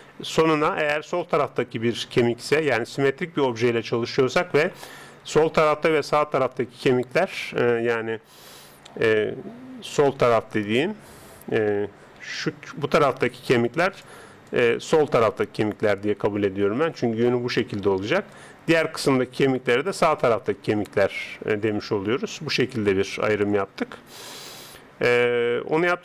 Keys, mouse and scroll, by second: 8.9-9.7 d, 10.1-12.2 middle drag, 10.1 d, 12.3-14.5 d, 12.3 click, 15.2-21.8 d, 18.3-21.9 drag, 23.1 d, 23.1 n, 25.2 middle click, 25.8-26.0 drag.